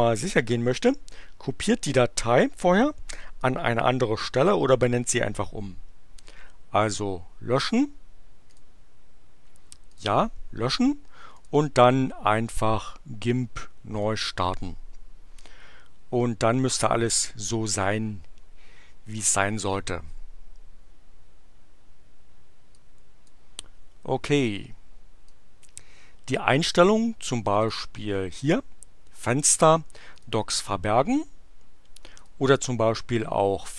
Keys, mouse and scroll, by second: 6.1 right click, 8.5 click, 9.9 click, 11.4 click, 14.0 click, 22.6-23.5 drag, 25.2-26.9 drag, 27.6 click, 30.1 click, 32.2 click.